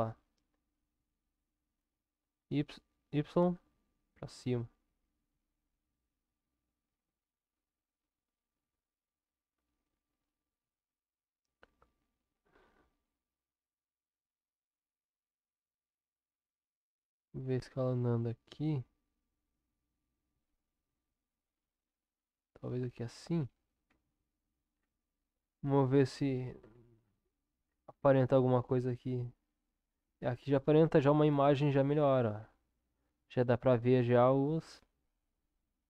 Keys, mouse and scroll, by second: 23.9 Tab, 25.4-26.4 middle drag, 26.4-26.9 drag, 28.0-30.0 middle drag, 30.0 click, 30.4-30.8 middle drag, 30.8-31.7 drag, 34.6-35.8 middle drag.